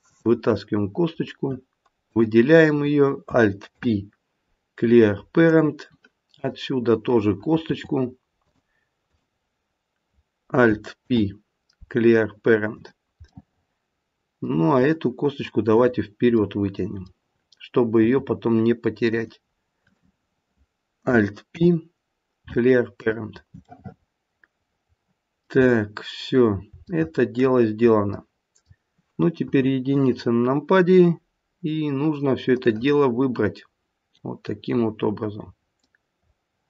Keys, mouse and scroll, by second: 0.1 click, 2.1 click, 3.6 alt+p, 6.4 click, 7.7 e, 9.0 click, 11.0 alt+p, 13.3 middle click, 13.6 middle click, 15.6 click, 16.4 middle click, 16.7 middle click, 18.0 e, 19.8 click, 21.4 alt+p, 23.6 middle click, 25.6-26.2 scroll down 2, 26.6 scroll down 1, 26.9 shift+middle click, 28.1 middle click, 29.3 KP_1, 32.5 click, 34.7-35.5 scroll up 5, 35.8 middle click, 36.4 middle click.